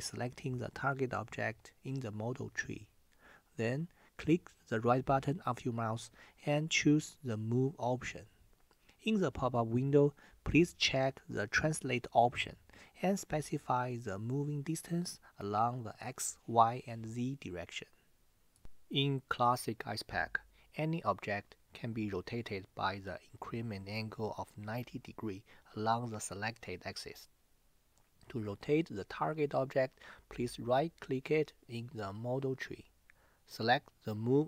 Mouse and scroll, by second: 3.9-8.4 right drag, 31.6-34.4 right drag.